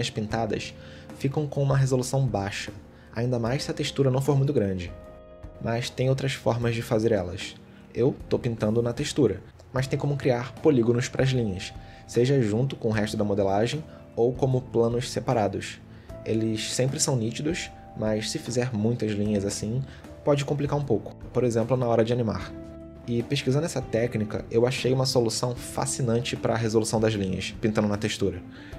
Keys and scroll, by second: 1.8 ctrl+z, 6.3 ctrl+z, 7.9 shift+x, 21.0 ctrl+z, 21.4-23.5 typing, 25.8 ctrl+z, 26.0 ctrl+z, 26.5 shift+x, 27.4 ctrl+z, 27.9 shift+x, 28.3 shift+x.